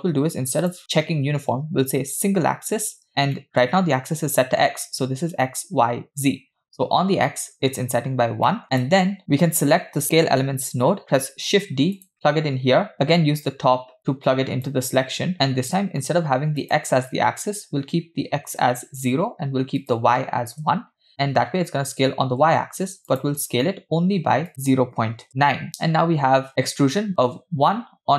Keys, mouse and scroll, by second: 0.6-3.0 drag, 3.4 middle click, 8.5 middle click, 8.6 click, 11.1 shift+d, 14.0 click, 15.3 middle click, 16.6-18.6 drag, 19.8 click, 23.1-25.3 drag, 25.8-26.3 scroll down 1, 26.3-27.6 scroll down 1, 27.6 scroll down 1.